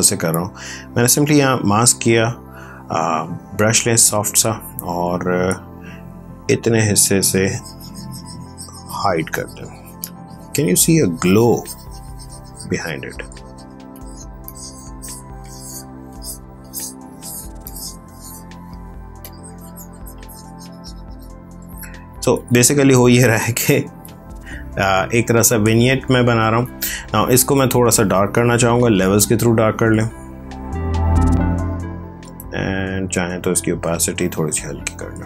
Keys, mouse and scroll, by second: 5.8 x, 6.4 click, 13.8 click, 23.3 click, 26.5 click, 28.0 ctrl+l, 29.6 click, 32.8 click.